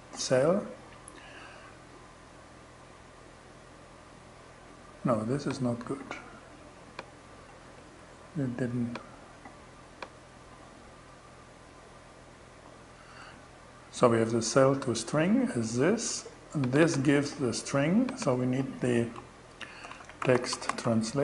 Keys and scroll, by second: 7.2 super+x, 12.1 BackSpace, 19.0-21.2 typing.